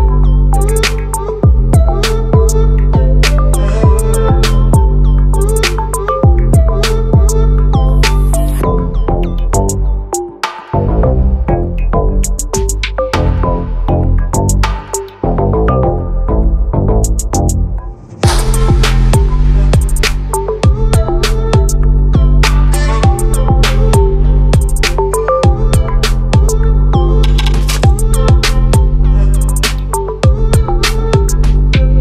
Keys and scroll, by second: 24.1 ctrl+t, 29.4 ctrl+t.